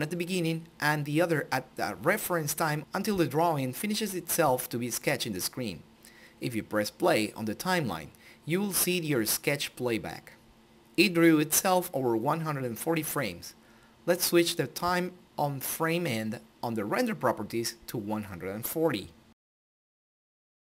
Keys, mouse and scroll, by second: 6.0 click, 12.9 click, 17.4 click.